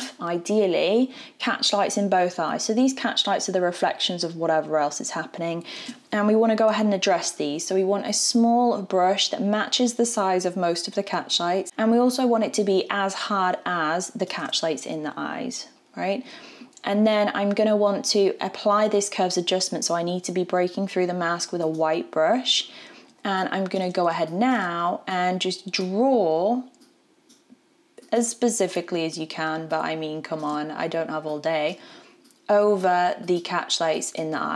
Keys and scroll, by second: 5.8 b.